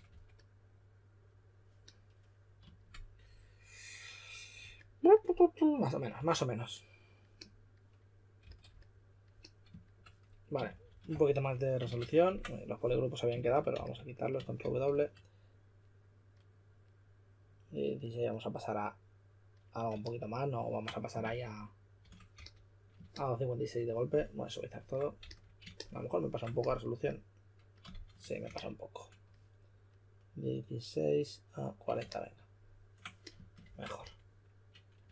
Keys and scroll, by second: 0.0 2, 6.1 2, 8.1-8.9 typing, 10.3-11.8 typing, 12.2 super+w, 13.3-15.3 typing, 21.2 shift+f, 22.0 shift+f, 22.3 s, 25.2 s, 27.9 shift+f, 28.4 s, 33.6-35.1 typing.